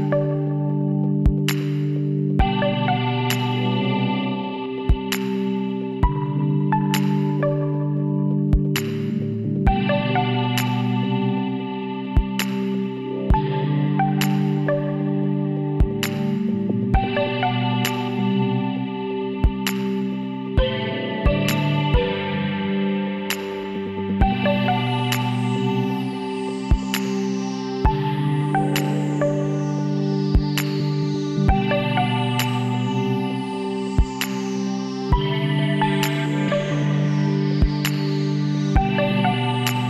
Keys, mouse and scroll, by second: 0.8-2.4 middle drag, 2.8 b, 5.3-7.0 middle drag, 8.5 b, 10.5 b, 14.0-15.6 middle drag, 16.1 c, 24.9 right click, 25.3 middle click, 25.5-26.8 right drag, 26.8-27.8 middle drag, 27.8 b, 30.0 middle click, 31.3-33.9 middle drag, 35.6 KP_7, 37.9 b.